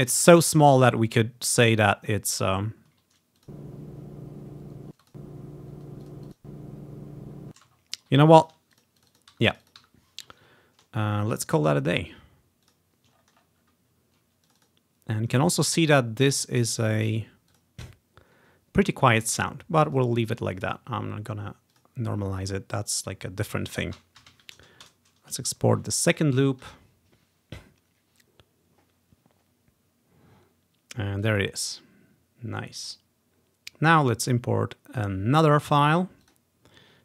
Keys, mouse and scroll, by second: 0.3 ctrl+scroll down 1, 0.9 scroll up 1, 2.2 scroll up 1, 2.6 scroll down 1, 3.4 click, 5.0 space, 5.1 click, 6.1 click, 6.3 click, 6.8 click, 7.6 space, 7.8-8.2 ctrl+scroll down 1, 8.5 click, 8.9 click, 9.3 click, 9.4 Delete, 9.6-11.6 drag, 9.9 Delete, 10.6 ctrl+scroll up 1, 11.1-12.4 ctrl+scroll down 1, 11.7 right click, 12.8 click, 13.2-13.9 ctrl+scroll up 1, 13.9 ctrl+scroll down 1, 14.1 ctrl+click, 14.5 middle click, 14.8 click, 15.1 click, 16.7 right click, 17.6 click, 19.9-24.2 drag, 24.2 typing, 24.9 Return, 26.4-27.2 typing, 31.2 click, 32.9 click, 34.2 click, 36.3 click.